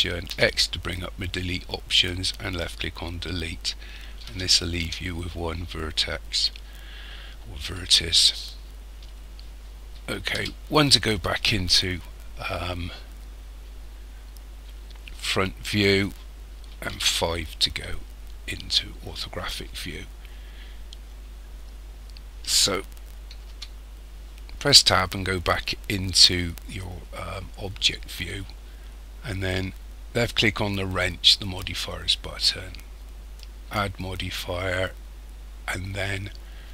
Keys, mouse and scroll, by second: 0.3 x, 4.3 a, 4.8 a, 10.4 KP_1, 13.1-13.6 scroll down 2, 13.9-15.6 scroll down 6, 16.9 KP_5, 23.5 Tab, 31.4 click, 33.3 click.